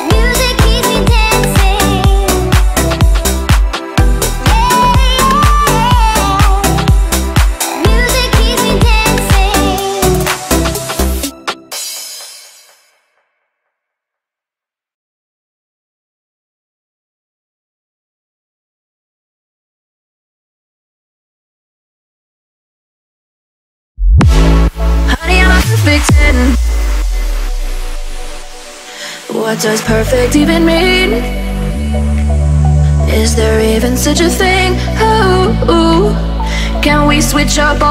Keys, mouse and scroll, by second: 0.6 middle click, 2.0 click, 3.0 scroll up 1, 4.2 f, 4.5 space, 4.9 click, 5.7 middle click, 6.1-6.4 scroll down 1, 6.9 ctrl+c, 7.2 space, 7.2 click, 10.1 m, 10.2 click, 10.2 click, 11.4 Left, 12.0-13.2 typing, 12.9 Return, 13.5 click, 14.0 middle click, 14.7 scroll up 1, 15.2 f, 15.5 click, 16.2-17.9 typing, 18.3 scroll up 1, 19.0 click, 20.0 m, 20.4 ctrl+click, 21.5 Up, 22.3-24.0 typing, 24.5 ctrl+click, 25.4 m, 26.8 ctrl+click, 27.2 scroll down 1, 27.6 shift+middle click, 28.8 scroll up 1, 30.1 click, 30.9-31.6 typing, 31.4 Return, 32.3 scroll down 1, 32.6 shift+middle click, 34.2 click, 36.2 shift+click.